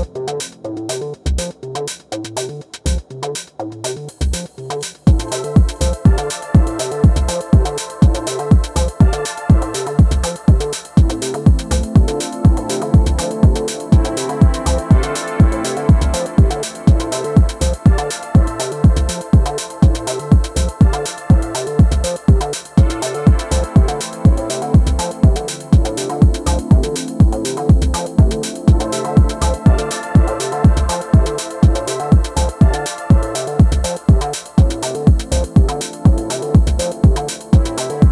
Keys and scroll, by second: 2.6 space, 33.9 t, 36.1 super+s, 36.5-38.1 typing.